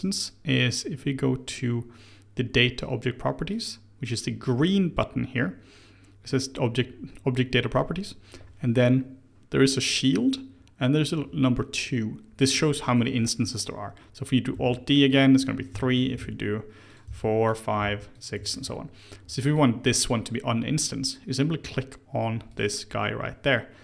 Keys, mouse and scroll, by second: 0.6 click, 1.4 click, 3.4-6.6 drag, 14.5 alt+d, 15.7 shift+middle click, 16.1 alt+d, 17.0 alt+d, 17.8 alt+d, 18.5-19.4 shift+middle drag, 19.4 click, 22.4-23.5 drag, 23.5-23.8 scroll down 1.